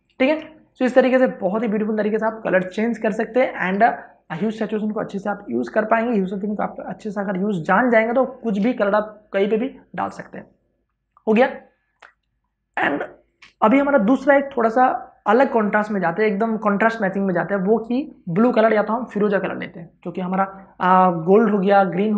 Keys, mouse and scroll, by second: 0.0 ctrl+d, 0.2 ctrl+space, 0.4 ctrl+click, 0.9 space, 3.8-7.5 ctrl+drag, 7.5 space, 7.7 ctrl+click, 11.7-12.0 scroll up 1, 12.0 ctrl+space, 12.2 ctrl+click, 12.5 ctrl+space.